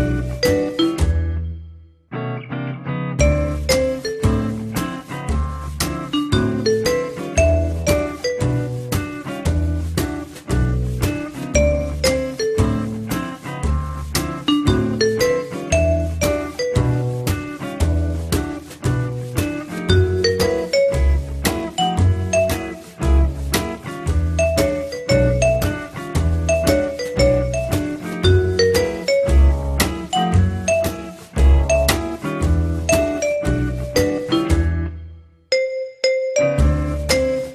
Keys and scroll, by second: 10.0 f, 23.8 1, 26.1 r, 31.6 w.